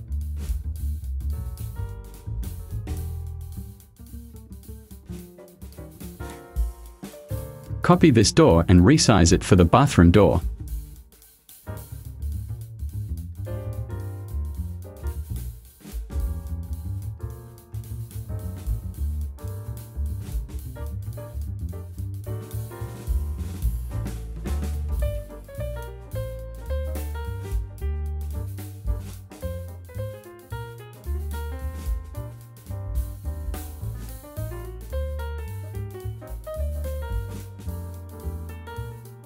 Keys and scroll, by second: 4.9 Delete, 10.4 space, 18.3 Delete.